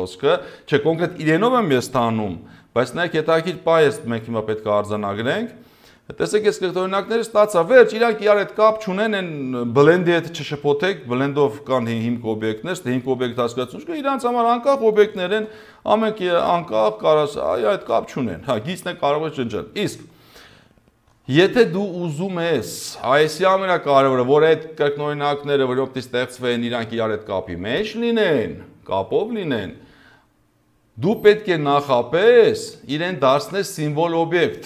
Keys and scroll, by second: 2.7 2, 4.0 0, 15.2 ctrl+z, 17.6 ctrl+z, 21.0 ctrl+z, 22.7 ctrl+z.